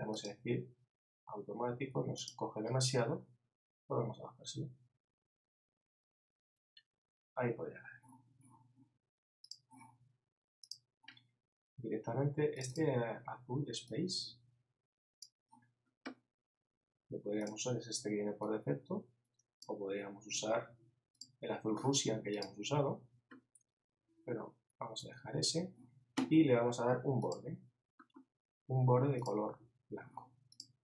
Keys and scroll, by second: 25.0 super+z.